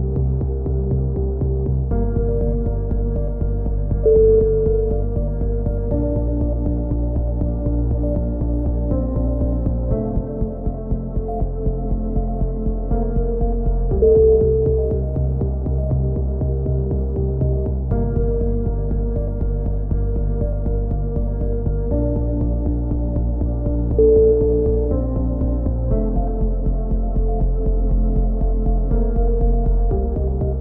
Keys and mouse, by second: 1.2 z, 2.2 s, 3.9 a, 4.0 z, 4.4 Tab, 5.0-6.0 drag, 7.7 KP_7, 8.7 z, 9.8 Tab, 11.3 s, 13.5 a, 13.7 z, 13.9 Tab, 14.7-15.7 drag, 16.5-17.9 drag, 22.5 Tab, 22.5-24.1 drag, 28.3 Tab, 28.7 click, 30.3 KP_7.